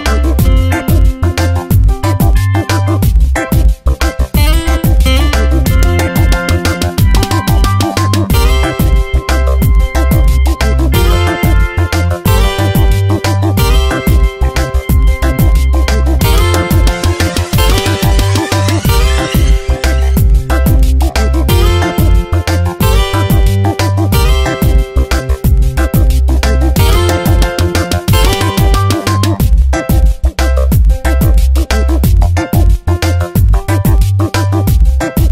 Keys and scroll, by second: 0.2 Tab, 0.7 space, 4.0 ctrl+[, 12.7 ctrl+z, 15.1 ctrl+z, 16.8 ctrl+t, 20.5 Return, 21.1 shift+Up, 21.2 shift+Right, 22.0 alt+Up, 22.8 shift+Right, 23.0 shift+Up, 23.3 shift+Right, 23.7 shift+Up, 33.6 ctrl+t.